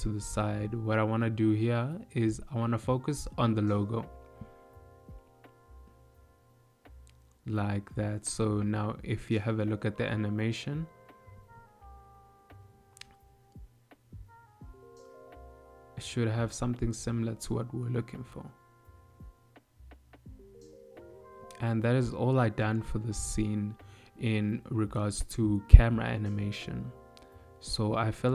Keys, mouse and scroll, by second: 2.3 shift+middle click, 5.9 middle click, 8.4 shift+middle click, 9.5 ctrl+middle click, 10.6 shift+middle click, 15.8 click, 16.5 space.